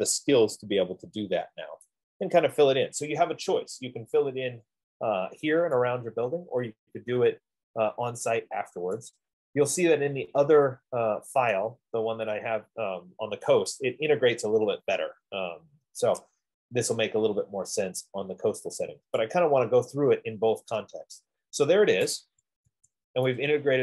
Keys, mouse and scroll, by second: 2.2 right click, 4.6 scroll, 9.3 right click, 11.4-15.9 right drag, 17.0 middle click, 17.2 middle click, 19.2 scroll, 19.5 right click, 21.8 scroll, 22.6 Escape, 23.0 Escape.